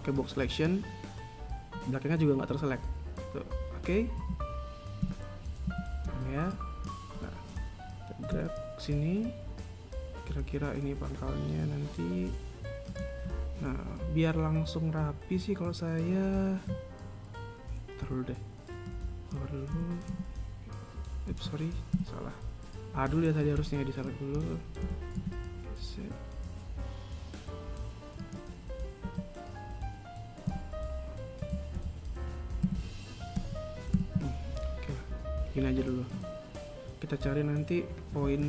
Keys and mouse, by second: 0.5 b, 5.0 z, 5.9 KP_1, 6.5 a, 6.9 b, 18.8 b, 22.7 a, 24.4 b, 29.8 a, 31.2 KP_1, 32.2 a, 32.6 b, 34.7 a.